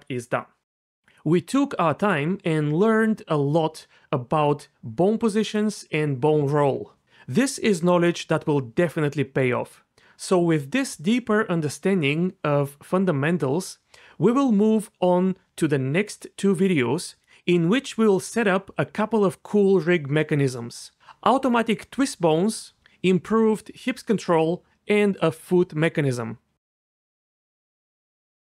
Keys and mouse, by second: 14.2 g, 14.8 r, 16.2-19.2 typing, 16.3 right click, 17.7 click, 18.9 click, 20.4 alt+r, 23.9 g, 24.4 r, 25.8-27.8 typing, 25.8 right click, 27.3 click.